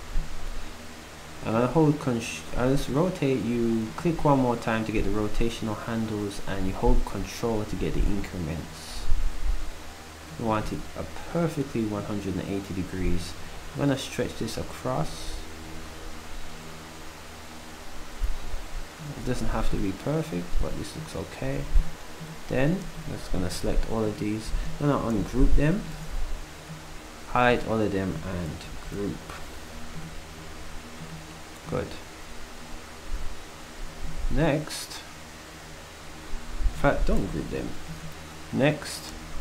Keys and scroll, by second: 19.3 s, 25.2 u, 28.9 ctrl+g.